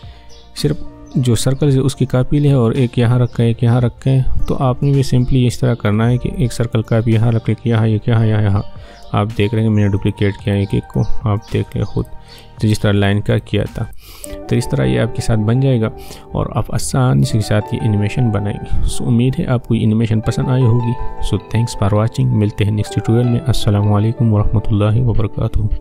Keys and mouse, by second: 4.0 space, 4.9-10.0 drag.